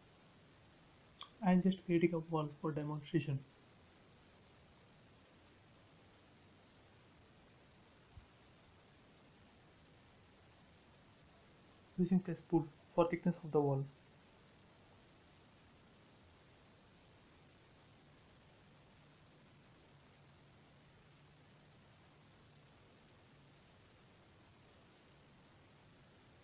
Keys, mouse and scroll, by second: 0.5 r, 1.2 click, 2.5 Left, 6.1 click, 6.1 space, 6.6 scroll up 1, 7.0 shift+middle click, 7.4-9.4 middle drag, 9.4 p, 9.8 click, 11.6 space, 12.0 click, 12.3 right click, 13.2 click, 14.7 m, 14.8 click, 15.8 Left, 16.8 click, 16.9 space, 17.3 middle click, 18.2 click, 19.3 m, 21.0 click, 21.1 space, 21.4 scroll up 1, 21.9-24.1 middle drag, 24.1 m, 24.8-25.4 scroll up 1, 25.4-26.4 middle drag.